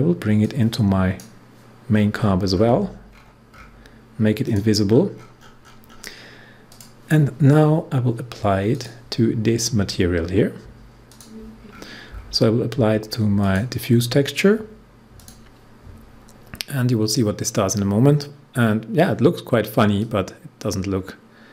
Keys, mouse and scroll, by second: 1.9-2.5 scroll up 1, 2.5-4.4 scroll down 1, 4.4 click, 4.8-5.5 scroll up 1, 6.6 click, 11.0 click, 11.7 scroll down 1, 12.3 scroll down 1, 13.3 click, 15.1 click, 19.9-21.5 drag.